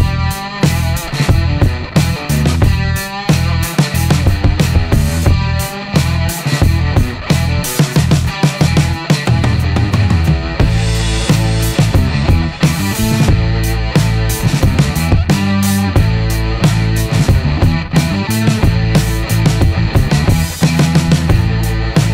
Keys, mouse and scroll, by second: 0.9 click, 2.4 click, 3.3-5.7 middle drag, 6.0 middle click, 7.8 click, 10.0 click, 10.8 click, 12.4 click, 13.0 click, 13.4 middle click, 15.5 click, 16.1 click, 16.6 middle click, 18.6 click, 19.4 click, 19.8 middle click.